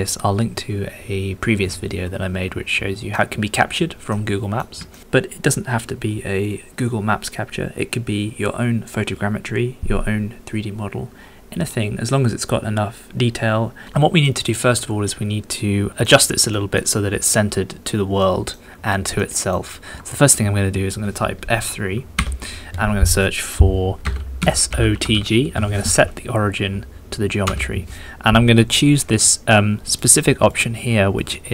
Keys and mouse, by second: 3.1 middle click, 4.1 middle click, 4.9-14.2 shift+middle drag, 14.5-16.0 middle drag, 16.5 shift+middle click, 18.2 middle click, 19.2 shift+middle click, 22.2 F3, 29.9 click, 30.5 click, 31.1-31.5 drag.